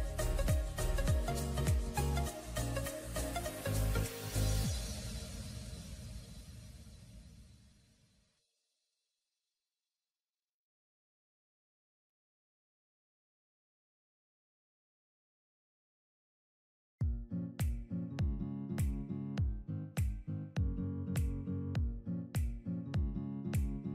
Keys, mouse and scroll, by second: 1.9-2.8 scroll up 1, 5.1-6.0 typing, 15.5-16.3 alt+scroll up 1, 18.5 double click, 18.8-19.3 typing, 22.8 double click.